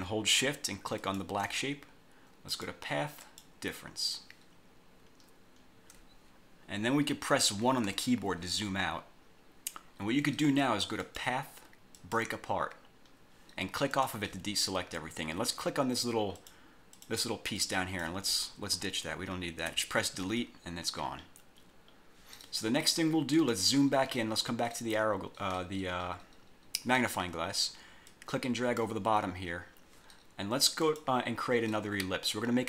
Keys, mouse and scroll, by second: 1.1 shift+click, 2.6 click, 3.3 click, 5.2 scroll down 2, 5.4-5.8 scroll up 2, 8.0 1, 8.7-9.3 scroll up 2, 9.6-9.9 scroll up 2, 11.2 click, 12.1 click, 12.9-13.3 scroll down 2, 14.1 click, 16.5 click, 17.1 click, 17.7 click, 19.8 Delete, 20.6-20.9 scroll down 2, 21.2 scroll up 2, 21.6-23.5 scroll down 2, 23.5 click, 28.2 click, 29.3-29.7 scroll down 1, 30.9 click.